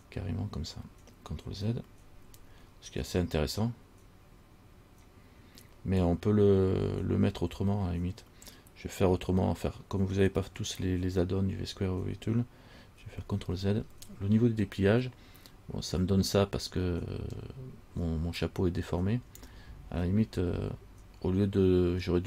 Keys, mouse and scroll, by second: 13.6 ctrl+z, 17.6-19.6 scroll up 1.